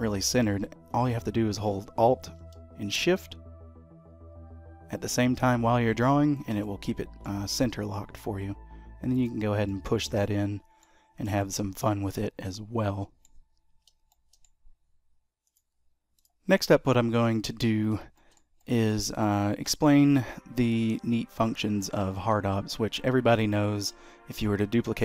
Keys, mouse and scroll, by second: 6.6 middle click, 9.7 middle click, 11.0 scroll down 1, 11.4 shift+middle click, 11.8 middle click, 13.7 scroll down 3, 14.3 shift+middle click, 16.3 click, 16.7 middle click, 18.0 scroll up 1, 18.3 shift+middle click, 18.7 middle click, 19.3 click, 19.7 shift+middle click, 20.1-20.4 scroll down 2, 20.4 middle click, 22.5 shift+d, 24.0 middle click, 24.8 scroll up 2.